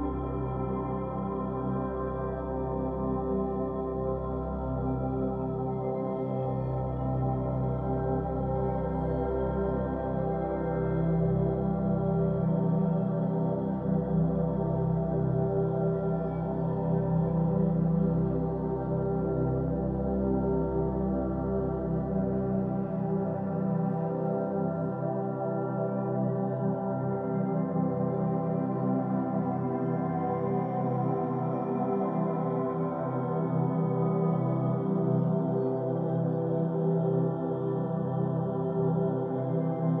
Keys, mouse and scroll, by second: 0.6-3.4 drag, 3.4-5.2 shift+middle drag, 5.2 click, 7.2-10.2 drag, 10.9 Tab, 12.8 Tab, 17.3 click, 18.9 click, 20.4-22.5 drag, 22.5-22.9 scroll up 5, 23.5 scroll down 1, 24.3-27.3 middle drag, 28.5-29.0 scroll down 2, 29.0-31.1 middle drag, 31.1-34.1 drag, 38.6 Tab, 39.1-39.7 scroll down 1, 39.7-40.0 middle drag.